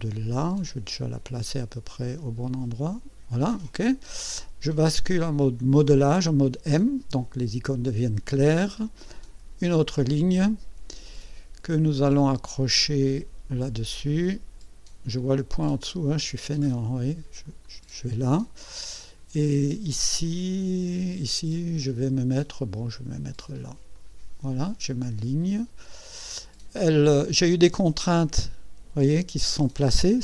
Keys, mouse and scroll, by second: 0.7 click, 3.5 click, 5.4 click, 9.1 click, 17.6 click, 23.9 click, 26.1 right click.